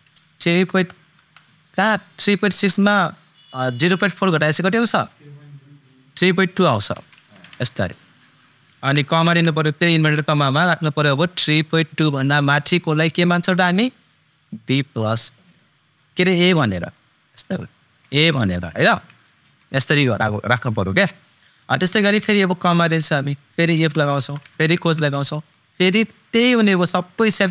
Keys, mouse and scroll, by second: 0.2 super+BackSpace, 16.7 shift+super+Num_Lock, 18.0 shift+super+a, 18.8 shift+super+,, 22.8 super+,, 23.9 super+i, 24.2 super+f, 24.8 shift+super+9, 26.4 super+click.